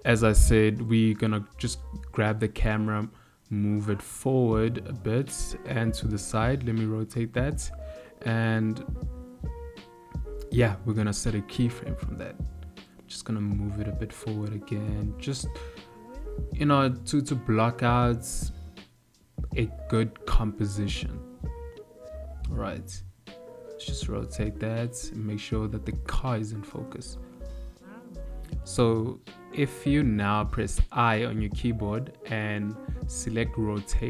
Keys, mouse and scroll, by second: 0.5 click, 1.3 click, 6.7 r, 13.3 click, 17.3 click, 19.8 g, 23.3 r.